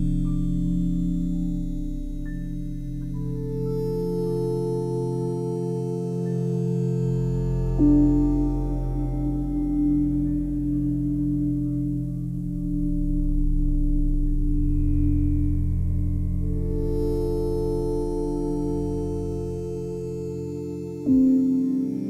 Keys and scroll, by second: 18.2 Delete.